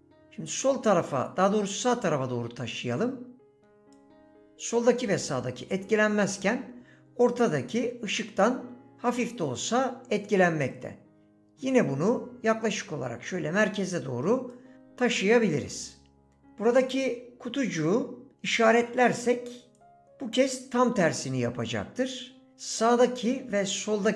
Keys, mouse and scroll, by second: 10.7 click, 19.6 click.